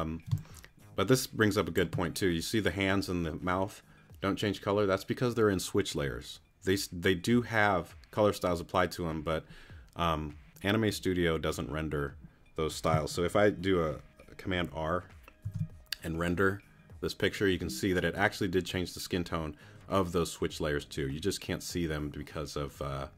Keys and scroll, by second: 0.3 space, 15.4 super+r.